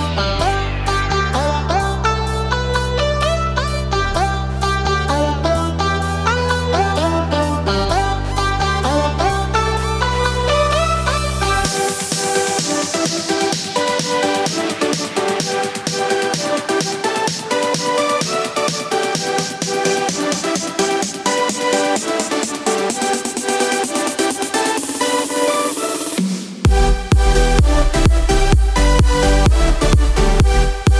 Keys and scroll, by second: 18.0 ctrl+z, 21.3 ctrl+z, 21.9 ctrl+z, 24.7 ctrl+z.